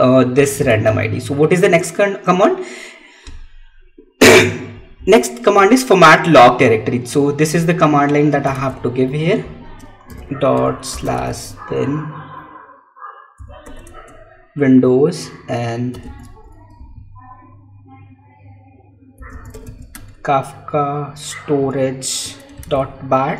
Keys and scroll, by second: 0.7 Tab, 8.9 Tab, 13.7 Tab, 19.8 Tab.